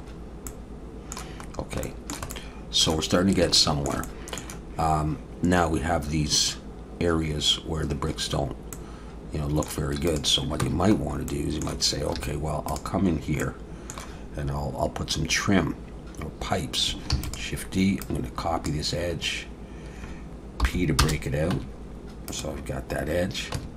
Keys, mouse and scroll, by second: 0.1 scroll up 1, 0.5 middle click, 1.8 shift+middle click, 2.3 middle click, 3.5 shift+middle click, 4.0 middle click, 8.7 middle click, 10.1 click, 10.6 Tab, 11.0 scroll up 2, 11.3 middle click, 12.2 2, 12.7 click, 13.4 middle click, 17.1 shift+d, 18.0 click, 20.6 p, 21.5 Tab, 22.3 click, 23.5 Tab.